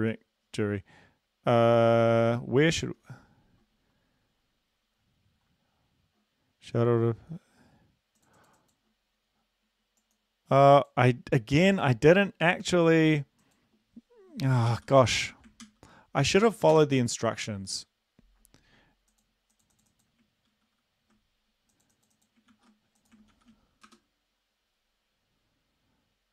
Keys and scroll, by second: 2.9 super+Left, 14.7 ctrl+c, 15.6 ctrl+l, 16.4-16.7 typing, 20.5 ctrl+c, 22.5 ctrl+c, 23.3 ctrl+v, 23.8 Return.